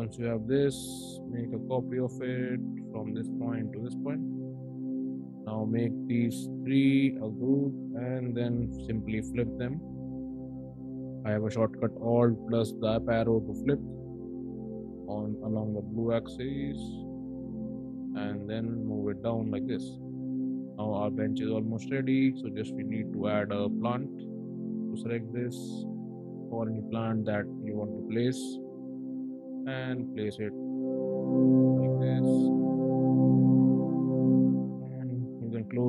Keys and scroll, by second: 0.4 m, 4.5 space, 7.4 ctrl+g, 9.3 alt+Up, 14.0 m, 17.2 space, 24.4 ctrl+c, 28.9 ctrl+v, 33.2 space.